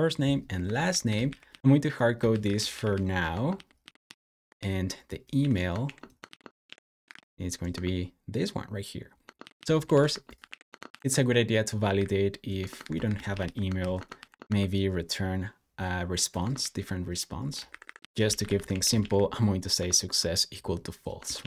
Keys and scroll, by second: 0.5-7.5 typing, 7.6 Return, 9.0-10.7 typing, 12.4-14.5 typing, 16.3 Escape, 16.4-20.1 typing, 21.2 super+s.